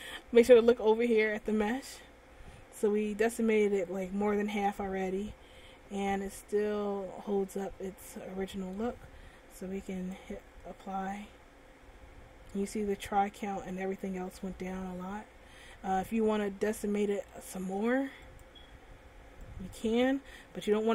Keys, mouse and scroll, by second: 5.7 middle click, 10.1 click, 16.5 middle click, 18.5 click.